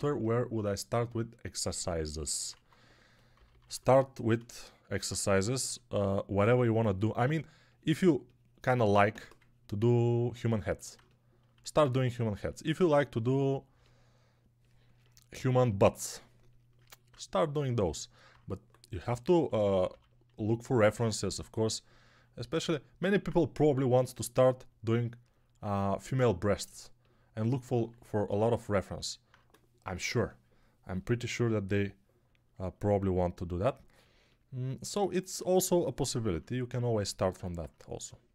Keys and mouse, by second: 2.4-3.6 typing, 5.2 3, 8.9 1, 18.9-19.8 typing.